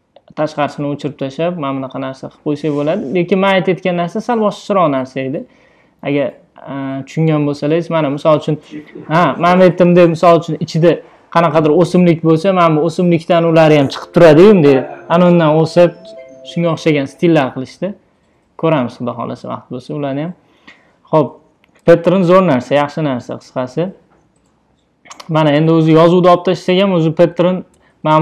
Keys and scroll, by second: 1.2 super+d, 27.6 BackSpace.